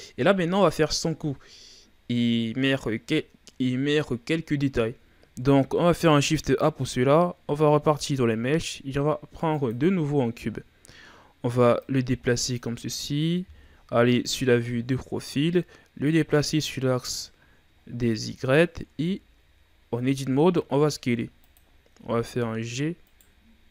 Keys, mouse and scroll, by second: 5.2 shift+a, 10.7-11.0 shift+scroll down 4, 11.0-11.8 scroll up 1, 11.8-13.4 drag, 13.4 KP_3, 14.5-15.1 ctrl+scroll up 5, 16.0-17.5 drag, 17.5 scroll up 1, 17.7-18.3 scroll down 3, 18.3-18.8 scroll up 2, 18.8 Tab, 20.2 s, 21.9 g.